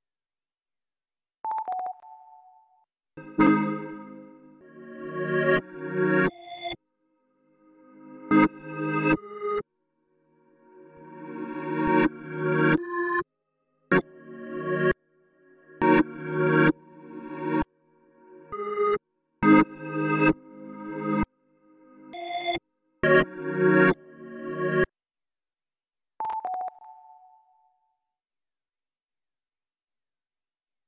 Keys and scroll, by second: 2.9-3.6 typing, 5.3 c, 6.4 v, 6.8 c, 24.8 ctrl+l, 24.8 alt+r, 24.8 Return.